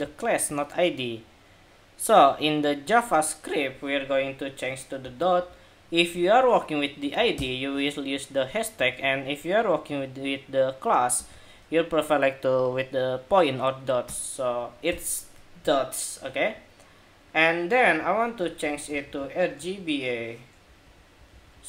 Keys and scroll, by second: 15.3 super+s.